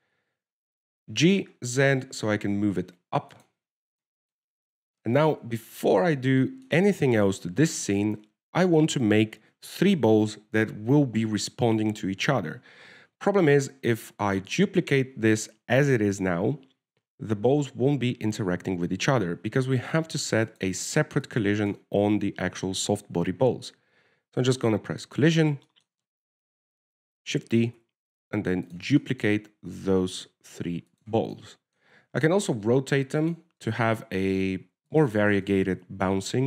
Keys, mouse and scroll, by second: 1.2 g, 5.0 scroll down 1, 5.1 scroll down 2, 5.3 shift+middle click, 6.7 z, 6.9 middle click, 7.7 shift+middle click, 8.6 z, 15.3 shift+middle click, 19.2 ctrl+s, 21.8 click, 22.6 click, 22.9 click, 26.3 click, 27.0 shift+middle click, 28.6 shift+d, 30.3 shift+middle click, 31.1 shift+d, 32.7 middle click, 33.8 r, 34.9 right click, 35.5 r.